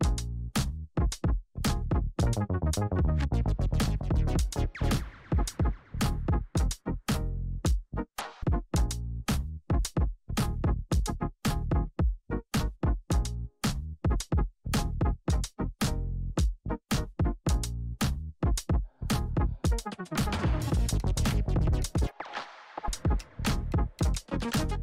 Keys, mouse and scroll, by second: 1.7 ctrl+d, 2.6-5.7 drag, 11.4 Return, 12.4 click, 13.0 t, 13.8 click, 14.8 Return, 15.7 click, 18.6 ctrl+0, 20.2-24.6 drag.